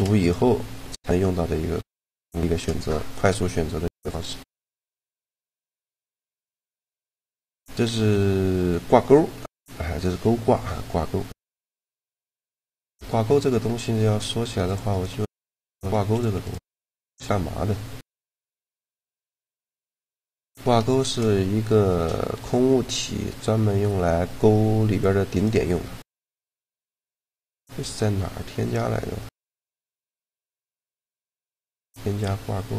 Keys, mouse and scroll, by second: 4.2 a, 5.8-7.4 right drag, 6.0 shift+g, 11.9-13.8 middle drag, 13.8 right click, 14.3 x, 15.0 x, 15.8 x, 17.8 KP_Decimal, 19.4 g, 22.2 Tab, 25.0-27.0 right drag, 27.0 click.